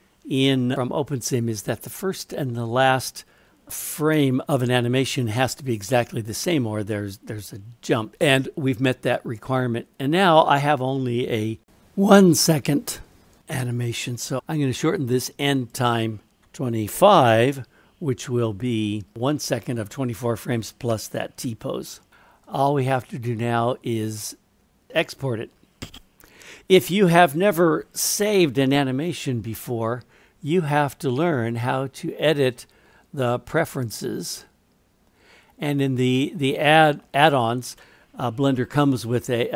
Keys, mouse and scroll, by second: 13.4-14.4 drag, 14.7-21.7 drag, 16.4 BackSpace, 22.4-26.0 drag, 31.5-33.5 drag.